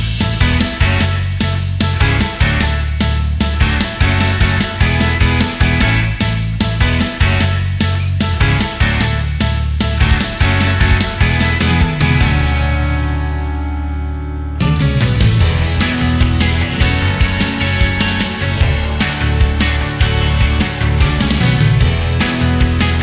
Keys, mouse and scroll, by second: 0.5 click, 1.6 click, 5.3 click, 5.4 double click, 6.2-7.8 typing, 9.0 right click, 10.1 click, 11.0 right click, 12.6 click, 14.4-15.4 drag, 16.1 click, 17.4 click, 18.0 click, 18.4-21.1 typing, 21.8 click.